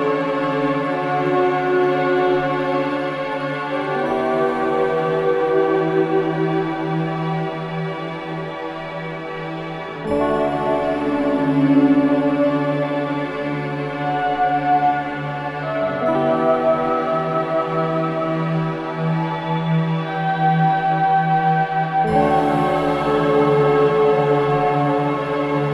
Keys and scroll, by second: 5.7 ctrl+z, 23.9 ctrl+z.